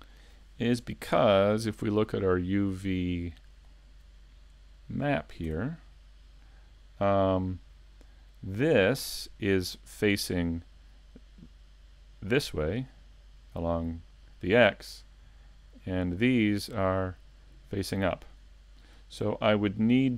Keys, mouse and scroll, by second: 1.9 click, 3.6 click, 5.5 Tab.